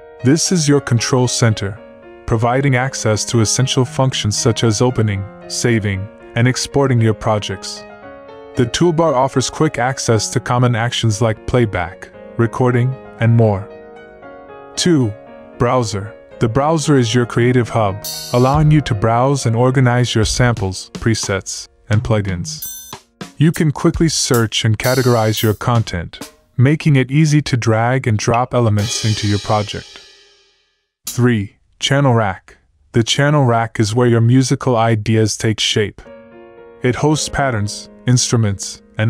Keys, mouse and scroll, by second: 11.3 F1, 32.6 F1, 32.9 F1, 35.1 space.